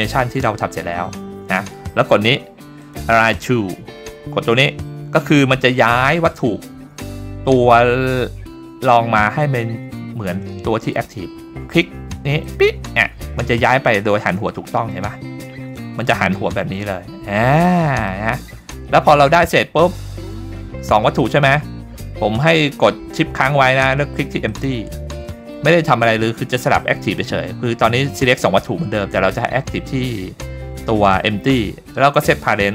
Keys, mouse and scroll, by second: 2.8 click, 3.4-4.2 scroll down 3, 12.4 click, 14.9-16.2 middle drag, 18.1-19.4 middle drag, 19.9 middle click, 20.3 scroll up 2, 21.2 middle click, 24.5 shift+click.